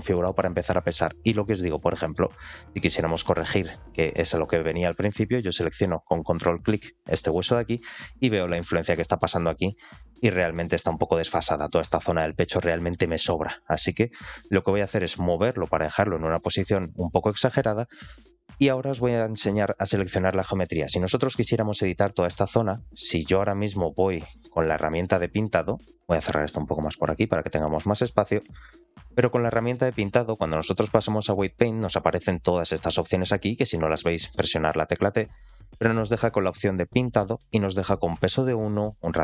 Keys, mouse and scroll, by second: 1.4 click, 1.9 shift+middle click, 2.4-3.0 scroll up 3, 3.0 shift+middle click, 3.9 shift+middle click, 4.3 scroll up 2, 6.4 ctrl+click, 7.2 shift+middle click, 9.0 r, 14.2 r, 18.6 middle click, 19.8 alt+middle click, 20.2-20.6 scroll up 2, 20.5 middle click, 21.0 shift+middle click, 21.5-22.1 scroll down 1, 22.1 middle click, 24.2 middle click, 25.9-27.3 drag, 27.7-28.0 scroll down 2, 28.2 shift+middle drag, 28.8 scroll down 1, 29.1 middle click, 33.9 t.